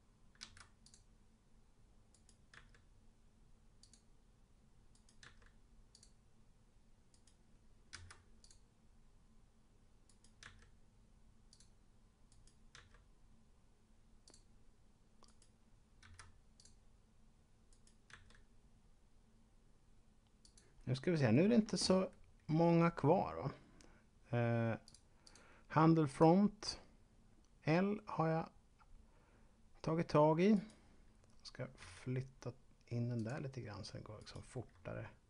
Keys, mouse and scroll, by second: 0.4 v, 0.8 click, 2.1 right click, 2.4 s, 3.8 click, 4.9 right click, 5.1 s, 5.8 click, 7.1 right click, 7.9 v, 8.4 click, 10.1 right click, 10.4 s, 11.4 click, 12.3 right click, 12.6 s, 14.1 click, 15.1 right click, 15.9 v, 16.6 click, 17.6 right click, 18.1 s, 20.4 click, 24.8 click, 26.1 click, 30.4 right click, 31.8 g, 33.1 click, 34.1 right click, 34.4 g.